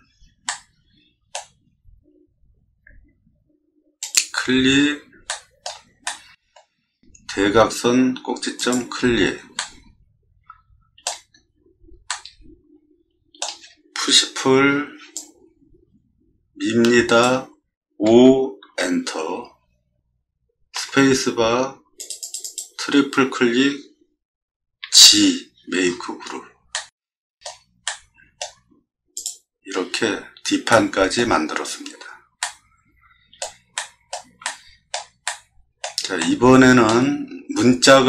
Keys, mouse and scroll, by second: 0.5 middle click, 4.0 click, 5.3 shift+middle click, 6.0 middle click, 8.6 middle click, 8.6 click, 9.6-11.0 middle drag, 12.1-13.4 middle drag, 14.4 p, 15.1-17.2 drag, 17.9 5, 18.7 Return, 20.7 space, 22.0 click, 22.2 click, 22.4 click, 24.8 g, 25.8 middle click, 25.9 scroll down 2, 26.7 middle click, 27.8 middle click, 28.7 scroll up 1, 29.1 click, 29.8 scroll down 2, 30.7-31.1 middle drag, 32.4 middle click, 33.8 middle click, 34.4 shift+middle click, 35.2 middle click, 36.2-36.9 shift+middle drag, 37.3 middle click.